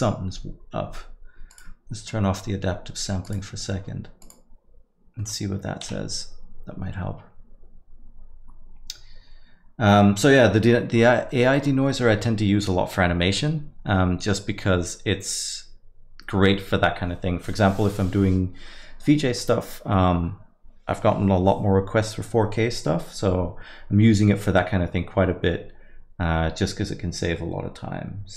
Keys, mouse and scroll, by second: 1.6 click, 3.2 click, 5.2 click, 5.2 middle click.